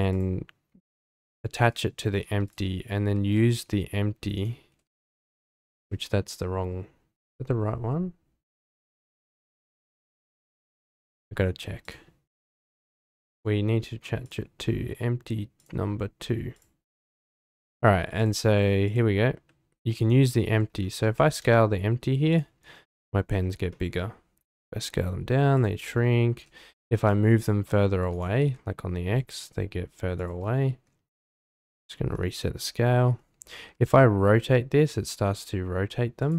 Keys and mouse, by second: 0.2 click, 2.5 click, 3.0 r, 3.2 r, 4.3 click, 4.7 g, 4.8 x, 11.8 click, 13.3 click, 14.2 click, 15.6 click, 16.5 click, 18.2 click, 18.9 click, 19.4 s, 21.1 s, 22.3 shift+drag, 23.7-24.1 middle drag, 24.5 s, 26.7 g, 27.0 y, 28.3 g, 28.4 x, 31.6 alt+s, 33.6 r, 33.7 z, 36.2 drag.